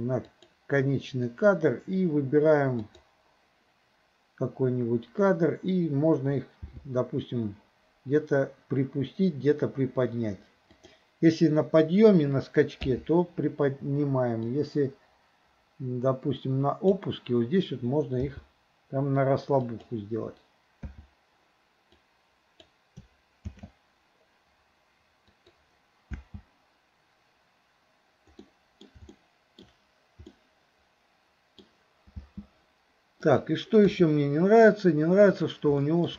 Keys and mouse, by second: 2.9 click, 6.7 g, 12.9 i, 14.5-17.0 drag, 18.2 g, 20.9 i, 22.0-22.7 drag, 23.6 shift+d, 26.2 space, 28.5-29.0 middle drag, 29.2-29.7 shift+middle drag, 30.4-31.7 middle drag, 32.2 space, 33.3 click, 33.9 KP_3, 35.4 click, 35.9 shift+middle drag.